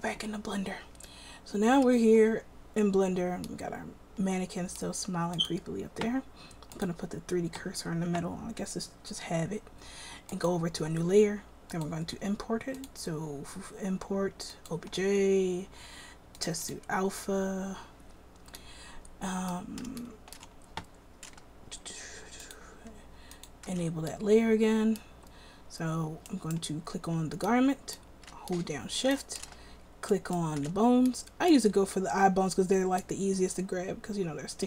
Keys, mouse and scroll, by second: 26.5-27.9 right drag, 27.9-28.7 middle drag, 30.3-33.2 middle drag.